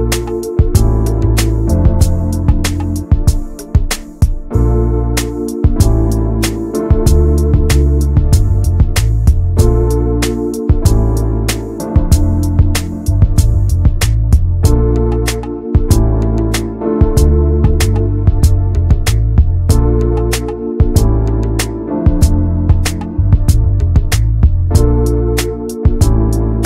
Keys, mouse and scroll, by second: 6.3 click, 7.1 middle click, 8.0 click, 8.2 middle click, 8.8 ctrl+s, 9.0 click, 9.3 middle click, 10.0 n, 11.2 click, 11.9-13.3 middle drag, 13.3 scroll up 1, 13.5 click, 13.8 middle click, 14.0 ctrl+s, 14.1 scroll down 1, 14.5 n, 14.7 middle click, 15.7 scroll up 1, 15.8 middle click, 16.2 ctrl+s, 18.2 middle click, 18.5 ctrl+s, 18.7 shift+middle click, 19.1 Tab, 19.3 click, 20.2 l, 20.6 l, 21.7 alt+middle click, 22.0 alt+middle click, 22.6 shift+d, 24.0 click, 25.2 shift+middle click, 25.6 alt+z, 25.8-26.6 scroll up 6, 26.1 shift+middle click.